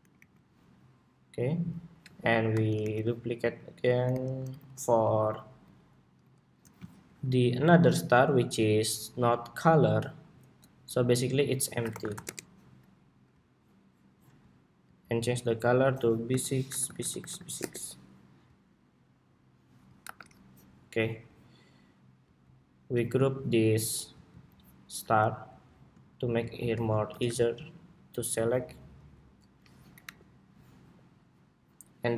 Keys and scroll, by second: 1.8 super+d, 3.8 alt+shift+Right, 4.4 alt+Left, 5.0 alt+Left, 5.6 alt+Left, 6.3 alt+Left, 19.7 super+-, 26.8 super+g, 29.7 alt+Up.